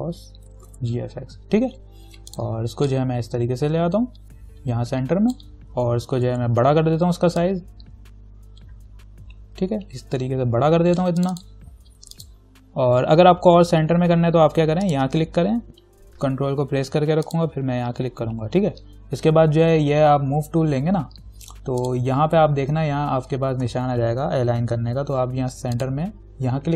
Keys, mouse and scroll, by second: 0.0-1.4 typing, 2.5-6.5 drag, 6.5 ctrl+t, 7.6-11.4 alt+drag, 15.1 click, 17.5 ctrl+click, 21.7 right click, 22.0 click, 26.0 click.